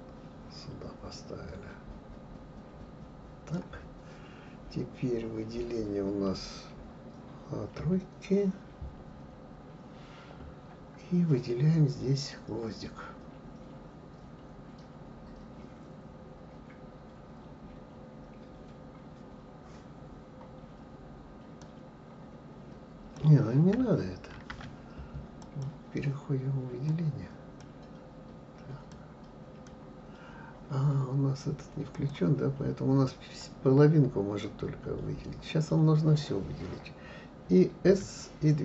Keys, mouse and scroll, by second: 7.8 KP_3, 8.9-9.5 scroll up 2, 21.6-24.3 drag, 24.3 ctrl+z, 25.4 click, 26.9 click, 28.9 click, 31.9 click, 33.4 click, 37.9 s.